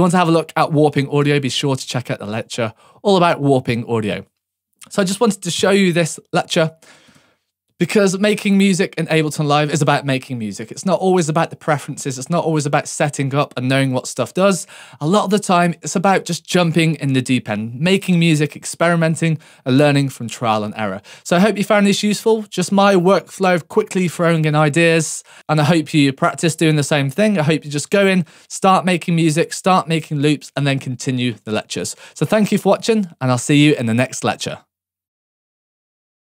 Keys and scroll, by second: 5.6 BackSpace.